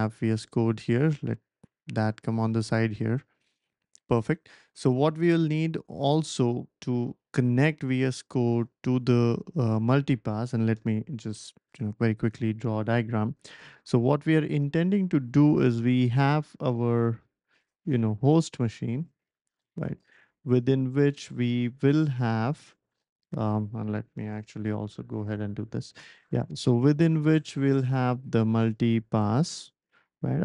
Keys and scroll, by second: 11.6 ctrl+alt+super+p, 24.9 typing.